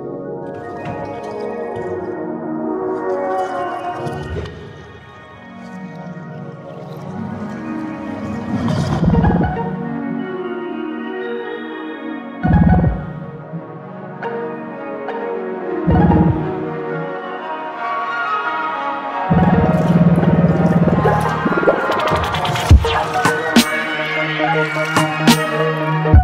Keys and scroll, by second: 1.2 ctrl+z.